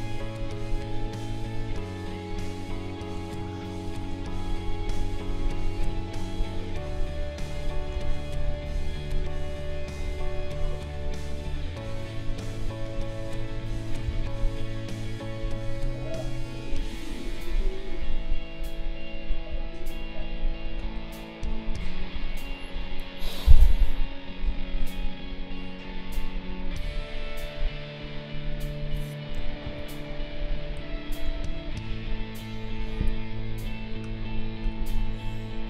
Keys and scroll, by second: 3.1 space, 7.9 ctrl+z, 14.0 ctrl+z, 20.8 space, 29.6 ctrl+a, 31.2 ctrl+g.